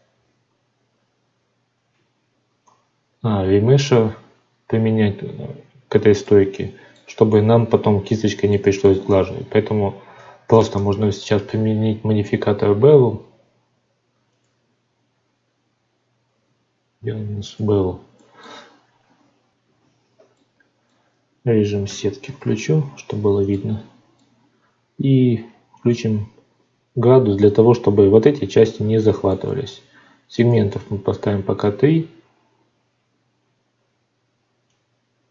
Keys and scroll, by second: 2.6 F9, 9.0 Tab, 10.5 ctrl+space, 19.7 F9, 22.2 alt+v.